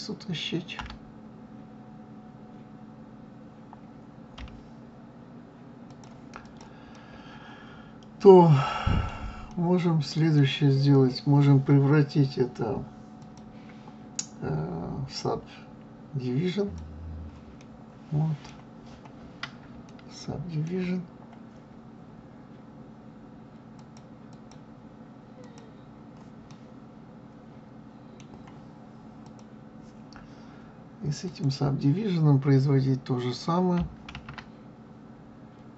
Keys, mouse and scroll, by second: 0.8 g, 6.4 click, 6.9-12.5 middle drag, 13.2-16.2 drag, 17.6-18.8 middle drag, 18.8-19.3 scroll up 2, 19.8 shift+scroll up 1, 19.8-21.0 shift+middle drag, 21.0-23.8 scroll up 1, 23.8 click, 24.3 click, 25.4 click, 26.5-29.2 middle drag, 29.2 click, 31.2 click, 34.1 ctrl+a.